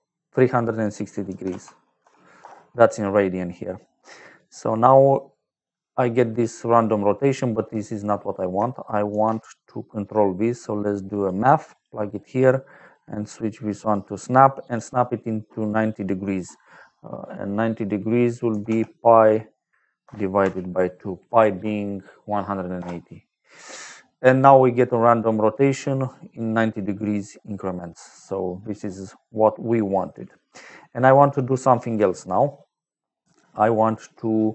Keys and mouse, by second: 0.2 click, 1.2 t, 1.9 u, 2.3 Return, 4.0 click, 4.8 click, 6.1 middle click, 8.0 click, 9.0 shift+a, 11.1 click, 11.6 click, 12.7 click, 13.7 click, 14.6 click, 18.4 p, 19.9 KP_Divide, 20.3 KP_2, 22.7 Return, 26.3 click, 27.9 middle click, 29.9 click, 33.1 z.